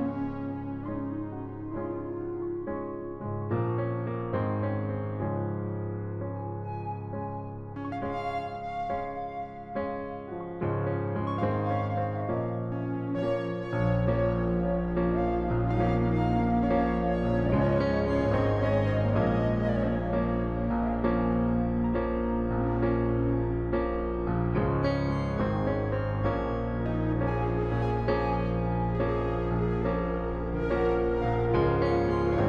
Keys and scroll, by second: 2.1 i, 6.2-7.8 typing, 9.4 typing, 16.2 space, 19.7-21.5 typing, 26.8 ctrl+z.